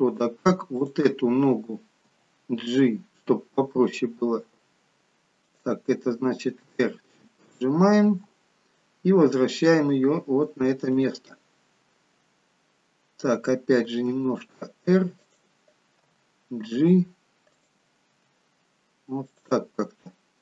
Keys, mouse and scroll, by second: 0.9 click, 2.2 g, 6.5 r, 8.1 g, 11.5 middle click, 14.1 r, 16.1 g, 18.2 g, 20.1 middle click.